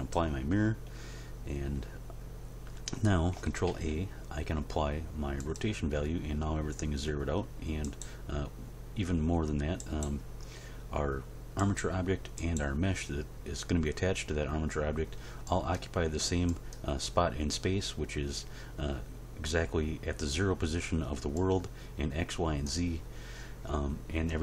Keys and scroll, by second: 3.6 ctrl+a.